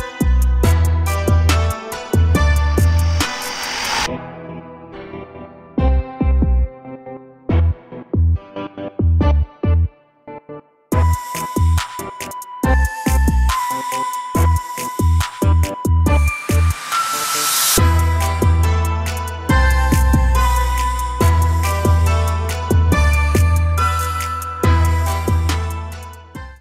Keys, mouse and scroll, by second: 2.1 click, 4.2-5.4 drag, 8.1 a, 8.3 a, 9.5 click, 11.6-14.6 drag, 16.3-26.6 drag.